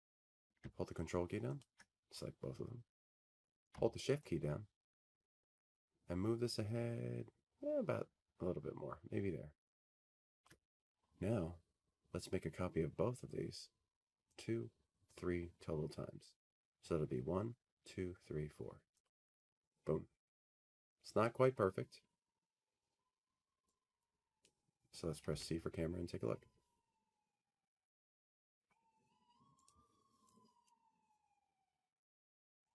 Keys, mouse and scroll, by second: 0.7 shift+click, 4.0 click, 5.4 click, 6.8 ctrl+click, 7.5 ctrl+click, 11.1 ctrl+click, 16.0 shift+click, 20.0 click, 20.9 click, 24.6 click, 30.0 click, 30.8 click, 30.8 c.